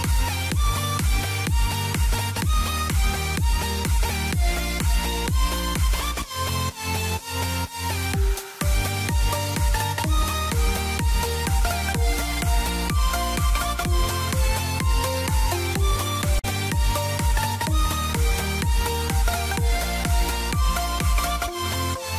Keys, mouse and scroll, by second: 0.9 ctrl+right click, 1.5 click, 2.0-3.0 typing, 3.1 click, 6.7 ctrl+right click, 7.6 Down, 8.3 Down, 11.2 shift+click, 12.4 ctrl+g, 13.0 click, 15.4 Up, 16.8 click, 17.6 middle click, 20.0 click, 20.6 click, 21.5 e, 21.8 click.